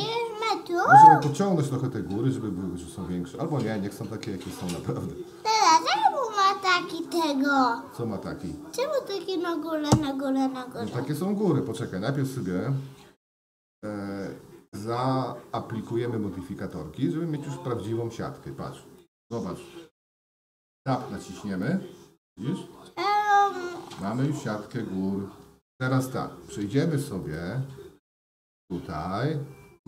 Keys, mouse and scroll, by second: 1.3-5.8 drag, 7.4 shift+middle click, 9.9 Left, 13.5-14.7 drag, 16.6-17.9 drag, 19.0 middle click, 20.5 Tab, 21.6-24.0 middle drag, 24.3 Tab, 27.2 click.